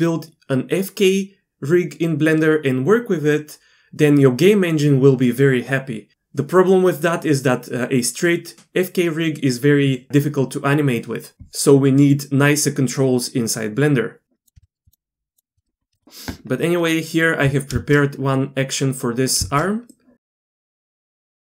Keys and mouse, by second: 15.3 shift+click, 16.0 alt+a, 17.7 shift+space, 19.4 shift+space, 19.9-20.3 shift+middle drag, 20.8 shift+middle click.